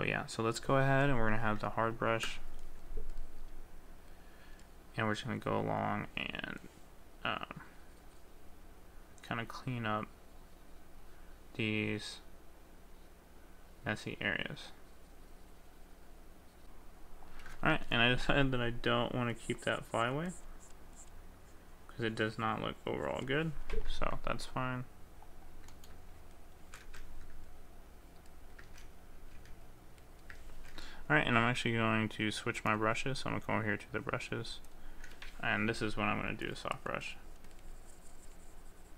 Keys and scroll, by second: 26.7 ctrl+z, 28.8 ctrl+z, 29.2 ctrl+z, 30.4 ctrl+z, 30.7 ctrl+z.